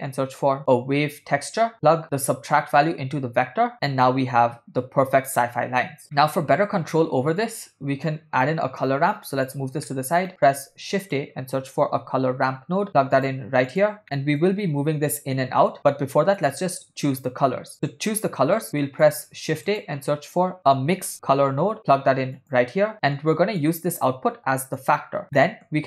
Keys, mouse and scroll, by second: 4.2-4.9 ctrl+middle drag, 6.2 middle click, 7.6 click, 8.8 click, 9.9 middle click, 10.3 ctrl+middle click, 11.0 shift+a, 14.4-16.8 drag, 18.1-18.4 drag, 18.8 click, 19.7 shift+a, 23.0 middle click, 24.1 click, 24.8 click, 25.6 middle click.